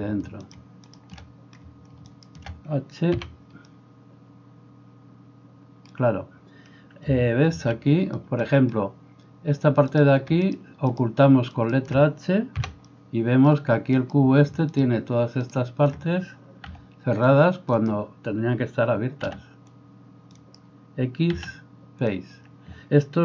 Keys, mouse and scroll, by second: 0.9 shift+middle click, 0.9 shift+right click, 2.1 shift+middle click, 2.1 shift+right click, 3.2 h, 7.5 alt+h, 10.9 shift+middle click, 10.9 shift+right click, 12.6 h, 13.9 middle click, 13.9 right click, 14.7 middle click, 14.7 right click, 16.7 c, 17.8-23.2 middle drag, 19.3 c, 21.4 x.